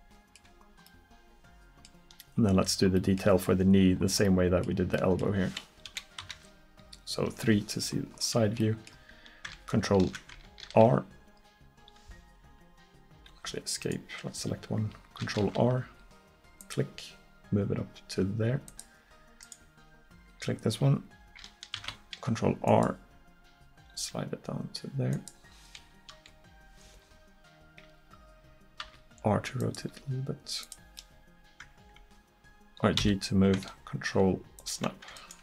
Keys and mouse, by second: 5.9 KP_1, 6.3 KP_3, 8.2 middle click, 10.7 ctrl+r, 13.9-18.7 drag, 15.5 ctrl+r, 19.5-21.8 drag, 21.8 ctrl+r, 26.2 KP_1, 28.9 r, 29.9 g, 31.0 click, 33.0 g, 35.2-35.4 drag.